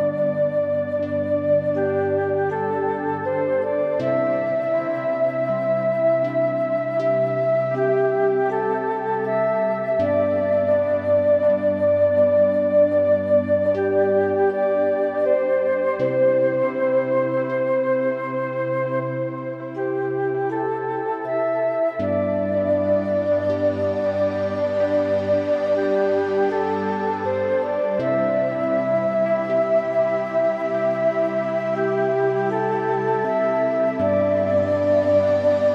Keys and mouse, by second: 2.1 click, 2.9 click, 3.3 Tab, 3.7 middle click, 4.3 Tab, 4.6 middle click, 6.0 middle click, 6.2 click, 6.5 Tab, 8.2 a, 8.7 ctrl+r, 14.2 click, 14.9 ctrl+r, 17.3 click, 17.5 click, 17.8 middle click, 18.5 middle click, 18.9 middle click, 19.6 Tab, 19.7 click, 19.9 middle click, 20.4 middle click, 21.9 1, 22.1 middle click, 23.2 middle click, 23.6 middle click, 24.2 click, 25.1 g, 25.7 Escape, 26.1 Tab, 26.2 click, 26.5 middle click, 26.9 middle click, 28.6 Tab, 29.5 middle click, 30.6 a, 31.0 ctrl+r, 35.1 click.